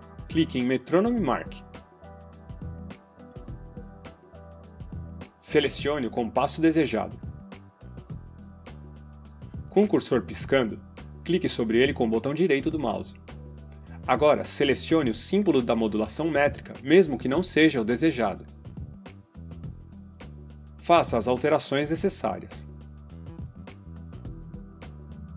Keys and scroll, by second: 25.1 ..